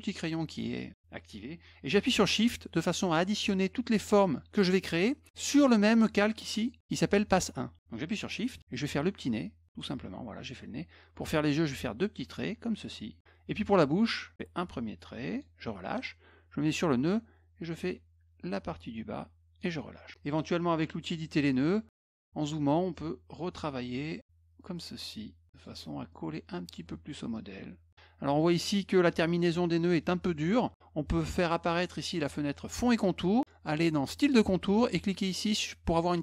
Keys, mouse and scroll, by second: 9.4 shift+click, 11.7 shift+click, 14.2-15.4 shift+drag, 17.1-19.6 shift+drag, 20.7 click, 21.6 middle click, 21.6-22.0 scroll up 2, 21.9 middle click, 22.9 click, 24.0 click, 24.6 click, 25.5 click, 26.1 click, 27.3 click, 28.3 middle click, 32.8 click, 34.2 click.